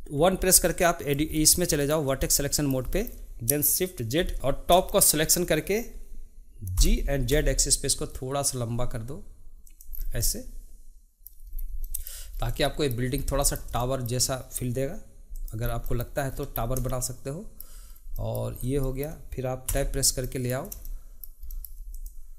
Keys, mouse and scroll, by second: 0.2 1, 0.6-4.2 middle drag, 4.2 shift+z, 4.3 click, 4.9-6.8 shift+middle drag, 6.8 g, 10.2-11.5 middle drag, 15.3 click, 15.6 scroll down 1, 15.9 middle click, 16.3-16.9 scroll up 5, 16.9-17.9 shift+middle drag, 17.9 scroll up 1, 18.1 middle click, 18.5-18.8 scroll down 2, 18.8 shift+middle click, 19.7 Tab, 20.2-21.9 middle drag, 21.9 click.